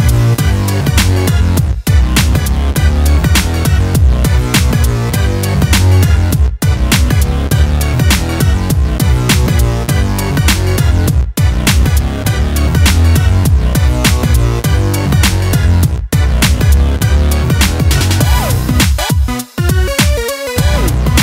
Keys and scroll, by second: 10.0 ctrl+j.